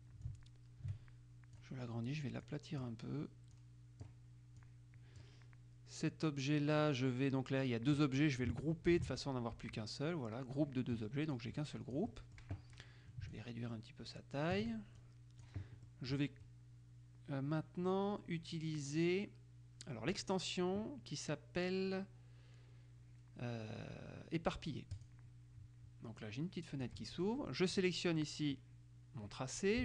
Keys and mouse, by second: 0.4-2.3 drag, 2.6 click, 3.7-4.7 drag, 9.1 ctrl+g, 11.5-13.0 drag, 13.5-15.2 ctrl+drag, 16.0 middle click, 20.3 click, 25.1 click, 26.3-27.5 drag, 27.9 click.